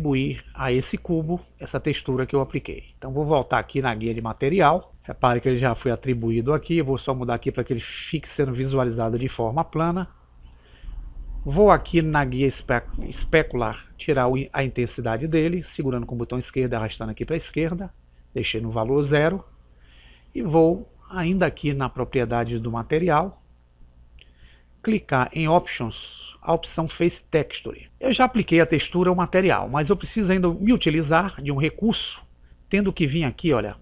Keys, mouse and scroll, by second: 0.0 click, 4.6 click, 7.7 click, 16.0 click, 21.1 click, 29.3-32.2 middle drag.